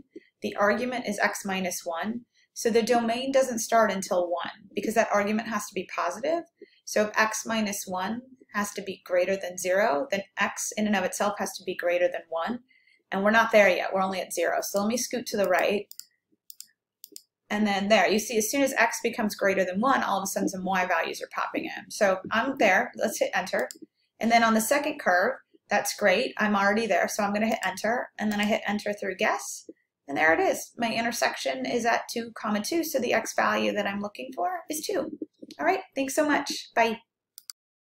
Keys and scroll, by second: 14.7 Right, 15.5 Right, 16.0 Right, 16.6 Right, 23.6 Right, 23.6 Return, 27.6 Return, 28.4 Return.